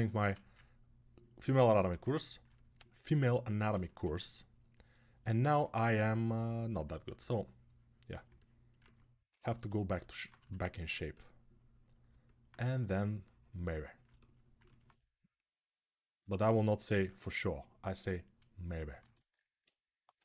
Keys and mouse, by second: 0.0 1, 1.4-20.2 alt+right drag, 6.8 2, 10.1 2, 19.9 g.